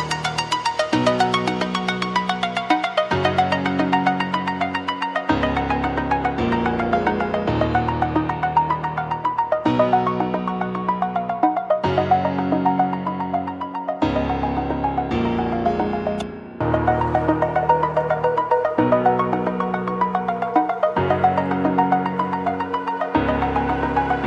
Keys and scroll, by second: 0.6 ctrl+j, 0.7 ctrl+t, 6.0 ctrl+t, 9.4 ctrl+z, 12.9 ctrl+g.